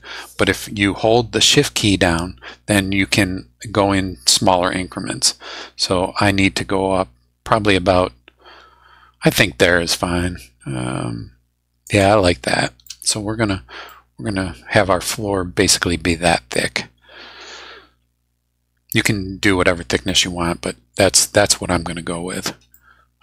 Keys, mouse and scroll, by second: 11.8 shift+click, 12.8 shift+click, 13.8-15.9 middle drag, 16.5-19.7 middle drag, 20.1-21.9 middle drag, 22.2 scroll down 2, 22.7 middle click, 22.8 scroll up 2.